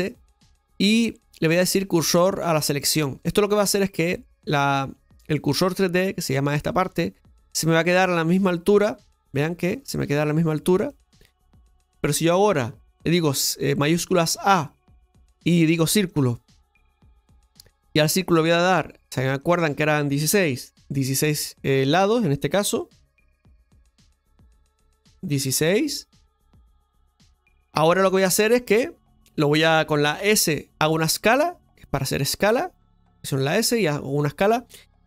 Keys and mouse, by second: 9.0 middle click, 10.9 middle click, 11.9 KP_7, 14.4 shift+a, 18.5 click, 19.5-28.3 drag.